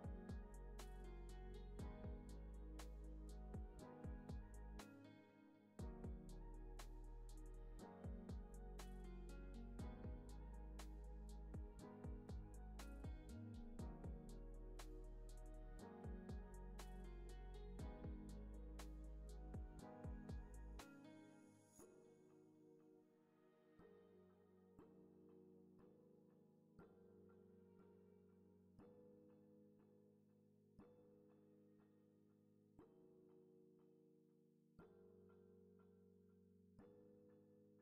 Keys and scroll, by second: 7.4 0, 7.4 Return, 15.3 7, 15.5 Return.